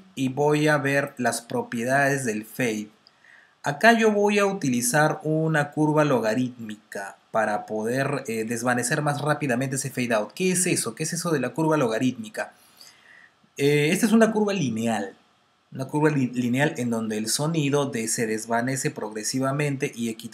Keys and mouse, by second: 1.5 click.